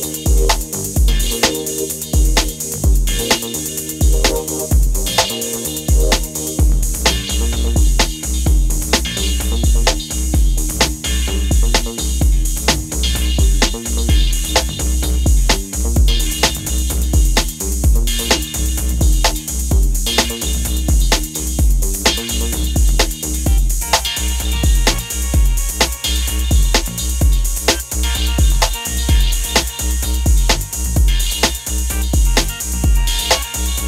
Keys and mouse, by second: 0.9 click, 1.0 g, 1.7 click, 3.7 Tab, 4.0 Tab, 4.2 click, 5.3 Tab, 6.0 Tab, 8.0 Tab, 8.3 Tab, 8.5 Tab, 8.7 Tab, 8.8 Tab, 8.9 Tab, 9.4 click, 11.4 right click, 11.5 ctrl+right click, 12.2 ctrl+?, 12.9 ctrl+?, 13.1 right click, 13.1 Tab, 13.5 right click, 13.9 click, 15.3 Tab, 15.3 click, 15.6 right click, 17.2 KP_1, 17.3 KP_0, 17.4 KP_1, 17.6 KP_1, 21.4 middle click, 22.5 Tab, 23.3 Tab, 23.5 Tab, 23.6 Tab, 26.7 click, 28.0 Tab, 28.6 g, 30.2 click, 31.8 s, 32.2 shift+Tab, 33.0 Tab, 33.0 right click, 33.0 2, 33.2 e, 33.3 alt+s, 33.5 g, 33.5 y.